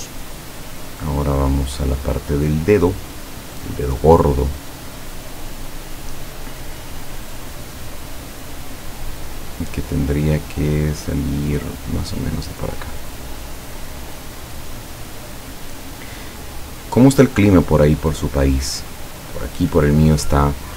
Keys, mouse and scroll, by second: 1.9 click, 13.0 click, 18.5 click, 19.5 click.